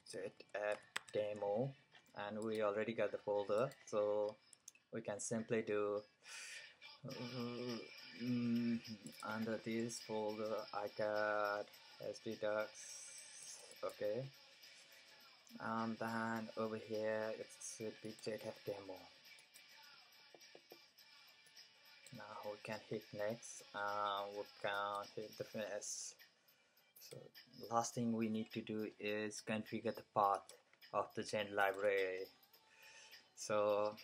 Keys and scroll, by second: 0.0-1.7 typing.